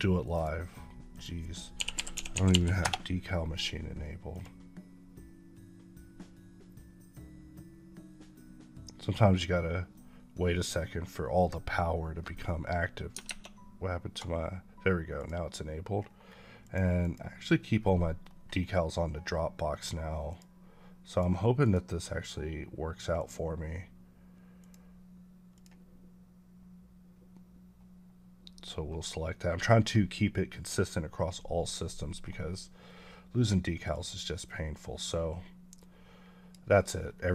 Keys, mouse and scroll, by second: 1.6-2.4 typing, 4.2 click, 13.1 alt+Tab, 15.0 click, 15.9-16.5 scroll down 1, 16.5 click, 18.1 scroll up 1, 33.8 click, 36.0 click, 36.9 scroll down 1.